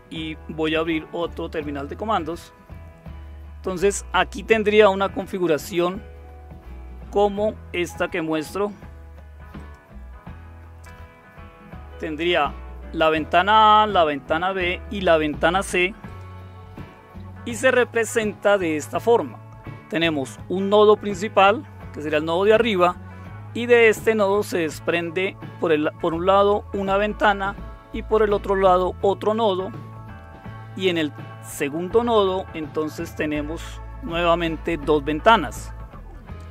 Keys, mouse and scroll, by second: 0.6 super+Return, 9.6 click, 16.0 click, 16.8-36.5 drag.